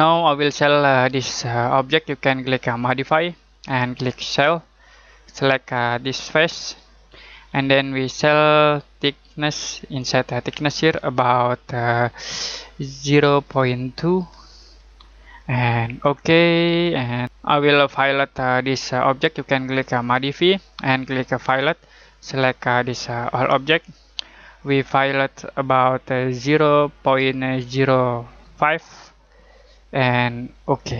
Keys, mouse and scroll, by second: 4.2 click, 13.0-14.6 typing, 16.0 click, 20.0 click, 26.4-28.6 typing, 30.6 click.